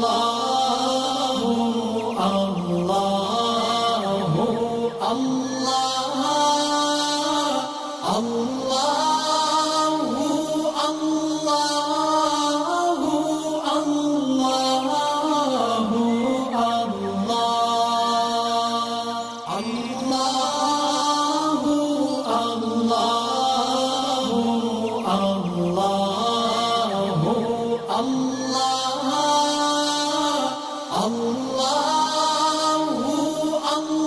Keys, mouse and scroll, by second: 0.2 click, 0.8-1.2 alt+scroll down 2, 2.3 click, 6.3-6.7 alt+scroll down 1, 7.0-8.1 alt+scroll up 4, 8.5 click, 8.7-9.6 alt+scroll up 2, 9.7-11.1 alt+click, 11.2-12.5 alt+scroll down 4, 13.0-14.1 alt+scroll up 2, 14.2-16.5 alt+drag, 16.7 alt+scroll down 1, 17.7 click, 18.2 alt+scroll down 1, 19.4 alt+scroll down 1, 19.8 space, 19.9 click, 20.9-21.5 alt+click, 21.7 alt+scroll up 1, 22.4 right click, 23.0-27.0 drag, 28.4 space, 28.6 click, 29.3 alt+scroll up 1, 30.7-34.0 shift+drag.